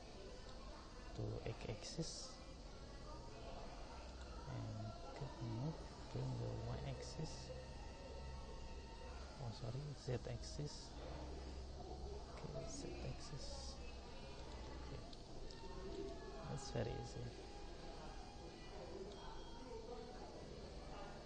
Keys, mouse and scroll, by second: 0.5 g, 5.5 g, 12.1 g, 15.1 g, 15.5 middle click, 16.9 middle drag, 17.3 middle drag.